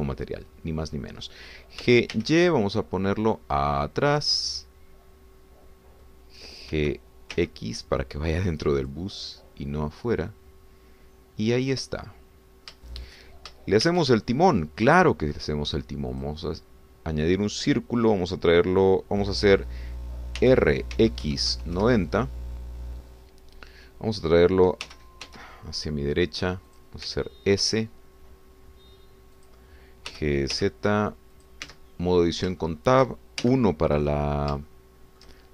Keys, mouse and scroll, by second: 0.6-2.0 shift+middle drag, 2.8 g, 3.1 y, 5.1 click, 5.4-7.2 middle drag, 7.7 g, 8.3 x, 9.8 click, 10.2-13.7 middle drag, 13.7 shift+click, 14.9 shift+a, 17.1 click, 18.6-19.0 scroll down 2, 21.4 r, 21.9 x, 22.3 9, 22.5 0, 22.8 Return, 25.8 g, 26.2 x, 27.7 click, 28.1 s, 30.4 click, 31.1 g, 31.5 z, 32.3 click, 32.7 Tab, 33.2-33.5 scroll up 1, 33.6 shift+middle click, 34.5 shift+1, 35.0-35.5 drag.